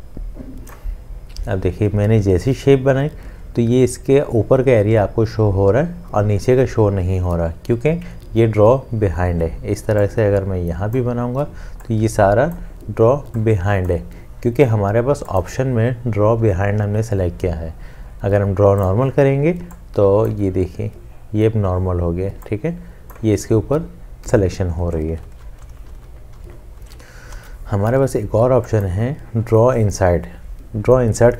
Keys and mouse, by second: 25.2 ctrl+z, 27.3 ctrl+z.